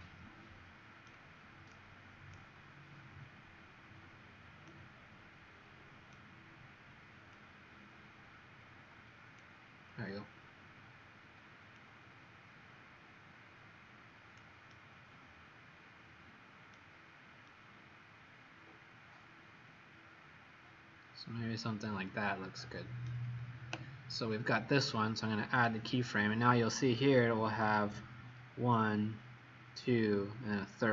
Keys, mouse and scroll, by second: 1.6 click, 3.0-3.4 scroll down 2, 4.6 right click, 4.6 right click, 7.2 click, 14.6 right click, 25.5 click.